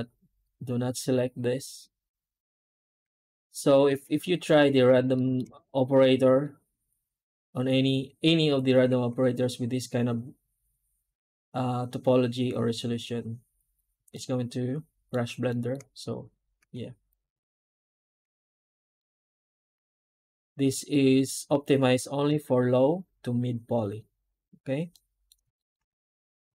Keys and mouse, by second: 2.8 Tab, 3.4 right click, 4.0 Tab, 5.0 shift+middle click, 8.8 a, 13.2 click, 14.0 middle click, 15.4 shift+middle click, 16.5 Tab, 17.0 right click, 17.2 Tab, 17.9 a, 18.2 Tab, 18.8-19.5 alt+middle drag, 24.8 middle drag, 25.0 middle click, 25.4 shift+middle drag, 25.8 Tab.